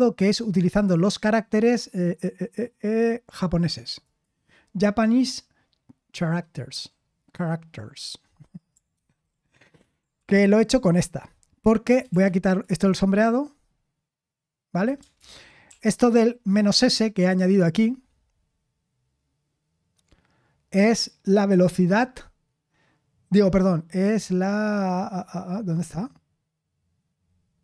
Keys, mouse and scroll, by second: 15.1 ctrl+c, 15.6 ctrl+p.